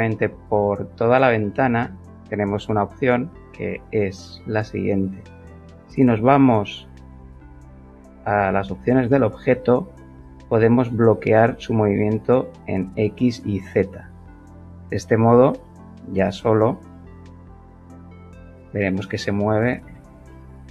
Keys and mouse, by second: 7.3 click, 11.1 click, 12.3 click, 14.7 g, 19.8 Escape.